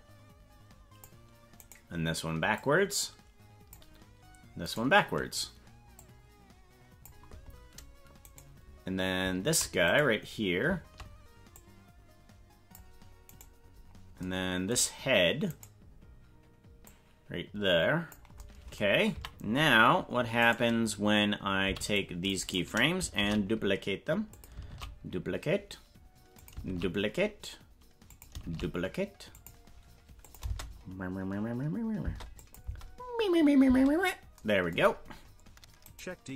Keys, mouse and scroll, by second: 1.6 right click, 2.6-3.7 drag, 4.7 right click, 5.9-7.0 drag, 8.3 right click, 9.9 right click, 11.5-12.8 drag, 13.3 right click, 15.5 right click, 16.8-18.2 drag, 19.1 a, 20.4 right click, 21.6 c, 23.2 shift+d, 24.7 shift+d, 28.4 shift+d, 30.3 click, 30.4 space, 32.1 space, 32.4 click, 32.7 space, 33.8 space, 34.9-35.2 scroll down 3, 35.9 right click.